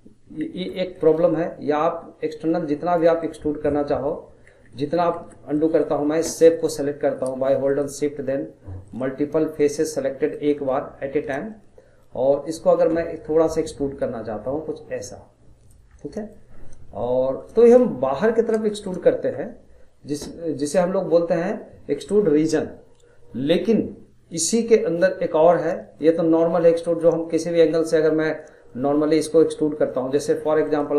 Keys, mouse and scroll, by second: 0.4 ctrl+z, 1.0-2.3 middle drag, 2.3 click, 3.2-4.5 middle drag, 4.5 ctrl+z, 5.2 ctrl+z, 5.6-7.6 middle drag, 7.6 shift+click, 8.8 shift+click, 9.5 shift+click, 10.3 shift+click, 11.5-13.7 middle drag, 13.7 click, 15.9 scroll, 16.2 middle click, 16.5-17.0 scroll, 17.0-18.3 shift+middle drag, 18.3-18.7 scroll, 18.7-22.2 shift+middle drag, 24.7-27.8 drag, 27.8 scroll, 28.0 middle click, 28.4 scroll, 28.7-30.6 middle drag, 30.6 click.